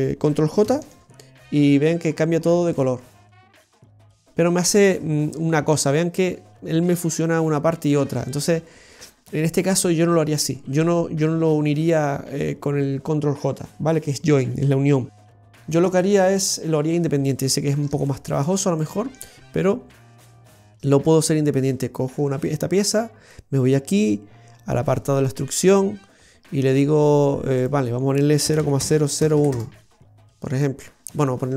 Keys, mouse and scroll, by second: 0.6 ctrl+j, 2.0-2.7 scroll up 4, 2.7 middle click, 4.8 scroll down 1, 15.4 ctrl+z, 16.3 scroll down 2, 17.0 middle click, 18.0 shift+middle click, 18.7 middle click, 20.9 right click, 24.2 scroll down 3, 25.6 click, 27.5 click.